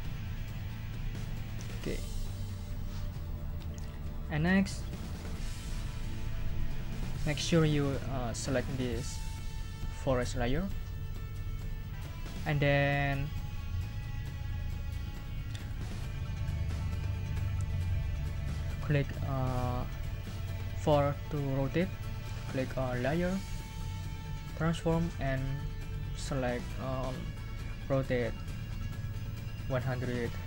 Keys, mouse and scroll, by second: 2.0 click, 10.5 click, 23.1 click.